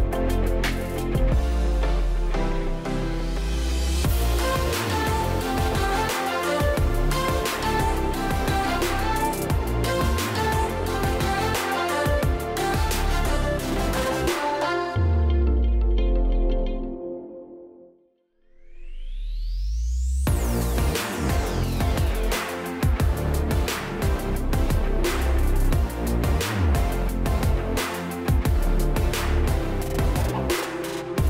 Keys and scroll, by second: 1.3 space, 5.1-5.9 space, 10.1 ctrl+z, 13.1 v, 13.7 space, 22.2-23.0 space, 26.5 space, 30.9 space.